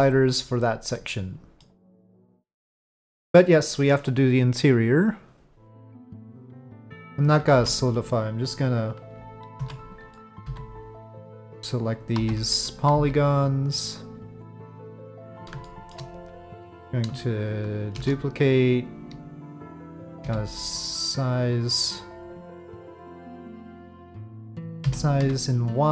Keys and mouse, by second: 0.9-1.6 drag, 2.4 ctrl+p, 2.6 drag, 7.5 alt+3, 9.6 alt+a, 10.1 click, 10.4 c, 12.2 3, 12.9 c, 14.8 middle click, 15.6 shift+middle click, 17.9 shift+d, 20.2 s, 24.8 s.